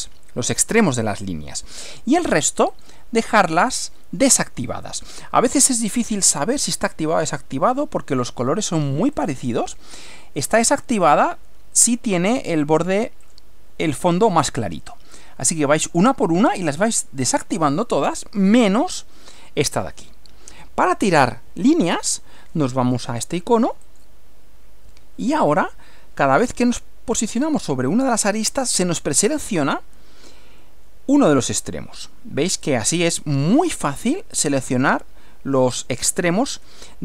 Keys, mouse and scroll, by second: 2.7 click, 3.6 click, 5.7 click, 6.6 click, 9.1 click, 11.0 click, 13.2 click, 14.1 click, 21.6 scroll up 1, 23.9 click.